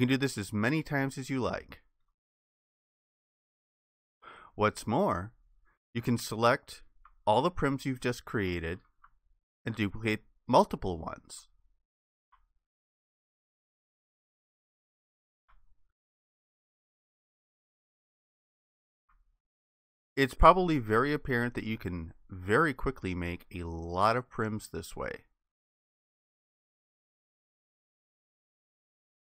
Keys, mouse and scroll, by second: 0.6 shift+click, 7.8 alt+click, 9.7 shift+click, 13.4 shift+click, 16.1 alt+click, 19.8 alt+click.